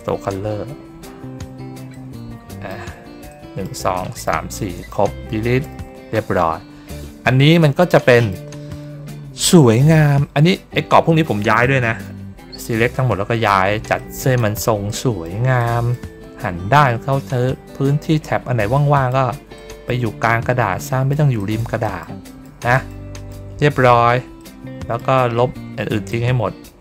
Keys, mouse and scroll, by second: 1.8 middle click, 3.2 middle click, 3.8 middle click, 4.4 middle click, 6.6 ctrl+middle click, 7.8 middle click, 9.8 ctrl+middle click, 13.9 middle click, 14.8 middle click, 15.5 middle click, 16.9 ctrl+scroll up 1, 17.4 ctrl+scroll down 1, 18.6 middle click, 19.4 middle click, 20.7 middle click, 21.3 middle click, 21.7 middle click, 22.1 middle click, 22.6 middle click, 23.0 middle click, 23.4 ctrl+scroll down 2, 24.3 ctrl+middle click, 26.0-26.8 drag.